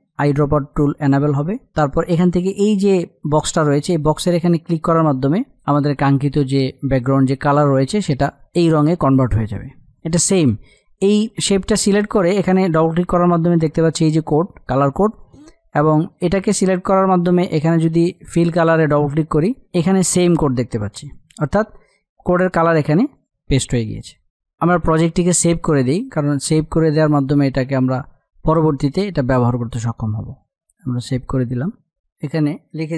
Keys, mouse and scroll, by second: 5.1 click, 8.8 space, 8.9 click, 9.3 space, 10.0 click, 15.9 click, 19.2 click, 24.7 F8, 26.3-30.7 drag, 32.1 click, 32.8-32.9 typing.